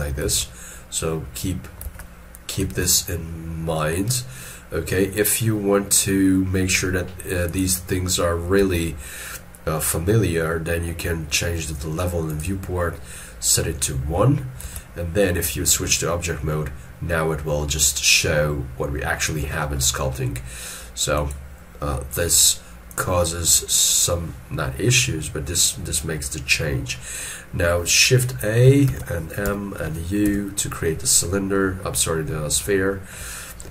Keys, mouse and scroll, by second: 0.1 ctrl+Tab, 0.2 ctrl+Tab, 1.8 ctrl+Tab, 14.6 ctrl+Tab, 26.9 middle click, 28.9 shift+a, 29.5 m, 31.5 middle click, 32.6 middle click, 33.3 ctrl+scroll up 1.